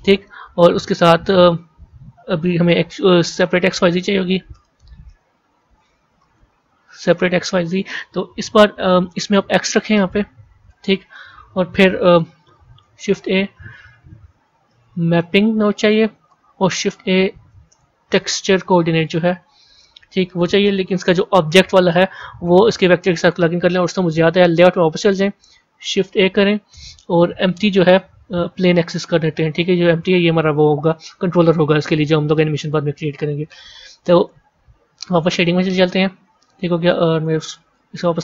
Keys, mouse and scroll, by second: 10.6 click, 12.7 middle click, 12.8 shift+a, 22.9-24.5 drag, 35.5 click.